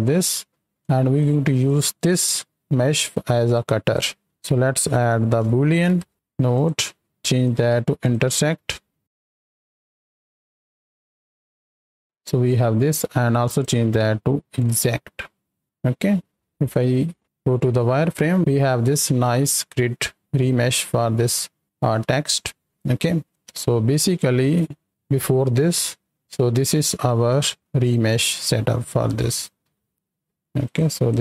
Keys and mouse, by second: 0.7 click, 1.6 click, 3.4 click, 5.4 o, 6.5-8.1 drag, 9.0-9.9 drag, 10.3-10.9 drag, 11.6 middle click, 13.4-15.6 drag, 16.5 KP_7, 16.8 z, 23.3 ctrl+space, 23.6 click, 24.5 right click, 24.9 right click, 26.1 click, 26.6 right drag, 28.8 right click, 29.9 ctrl+j, 30.5 click, 31.0-31.2 drag.